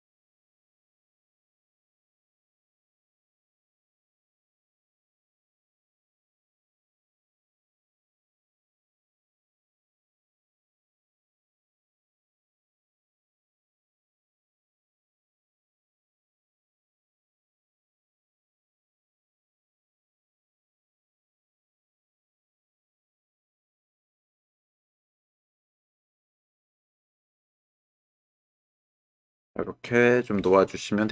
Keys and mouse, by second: 2.2 click, 3.1 middle click, 3.7-6.2 middle drag, 11.0-12.3 middle drag, 14.5 s, 16.2-17.2 drag, 17.4 s, 19.4 click, 20.6 ctrl+click, 21.1 click, 22.0 ctrl+click, 22.4 click, 23.1 Tab, 24.1-25.2 drag, 25.3 click, 26.3 shift+middle click, 26.8 ctrl+middle click, 27.5-29.0 middle drag, 29.3 ctrl+middle click, 30.1 middle click.